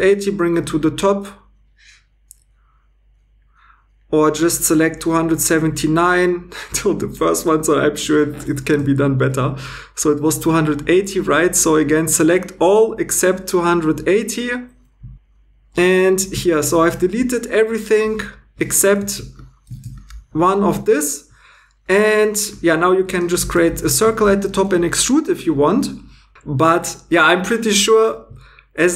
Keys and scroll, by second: 8.8 x, 17.1 x, 19.1 shift+e, 19.8 shift+e, 23.7 shift+e, 24.2 shift+e.